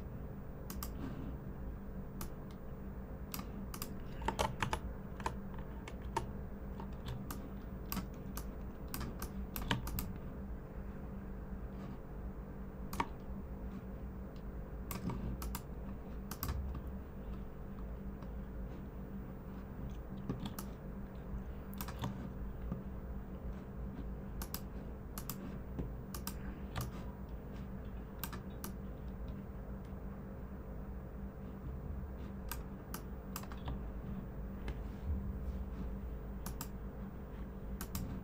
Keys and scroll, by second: 4.6 super+=, 5.1 super+=, 6.0 super+-, 7.0-7.6 typing, 20.4-21.0 typing.